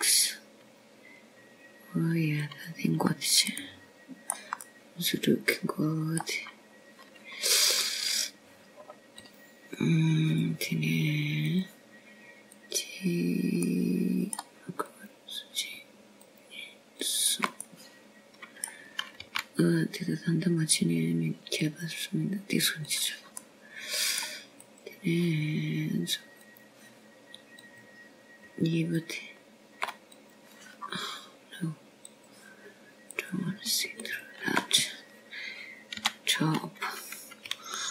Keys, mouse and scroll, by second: 0.2 e, 1.7 g, 6.2 middle click, 6.5 middle click, 7.6 middle click, 9.1 scroll down 1, 9.2 right click, 10.7-11.0 scroll up 4, 12.0 click, 14.3 click, 15.4 click, 16.5 middle click, 17.7 click, 19.1 shift+click, 19.9 click, 20.5 middle click, 22.1 g, 25.7 click, 26.3 middle click, 27.5 click, 29.3 click, 30.5 click, 31.9 shift+click, 33.0 click, 35.0 click, 36.0 click, 36.9 shift+click.